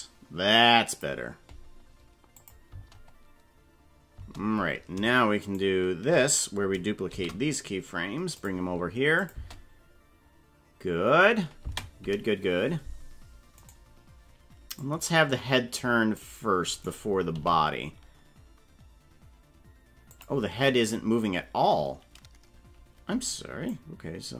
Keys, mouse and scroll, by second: 2.4 click, 2.7 space, 4.2 space, 5.4 shift+right click, 6.3 right click, 7.1 shift+d, 9.2 click, 9.3 space, 11.7 space, 13.7 right click, 14.8-16.3 drag, 16.7 right click, 17.3 g, 23.6 click.